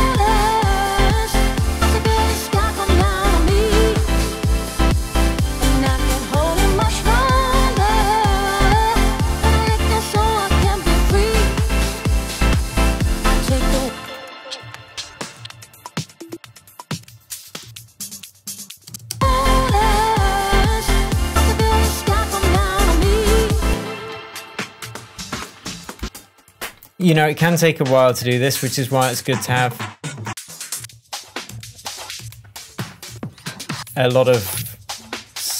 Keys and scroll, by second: 4.2 Down, 6.6 Down, 8.6 Down, 10.1 Down, 12.6 Down, 13.7 space, 14.5 Down, 18.8 space, 23.6 space, 23.9 Down, 30.7 Up, 33.7 Down.